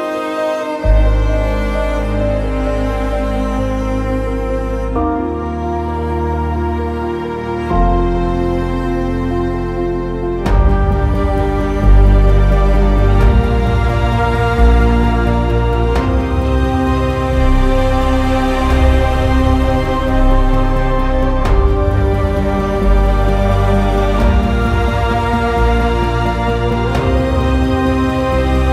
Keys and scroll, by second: 19.3 r.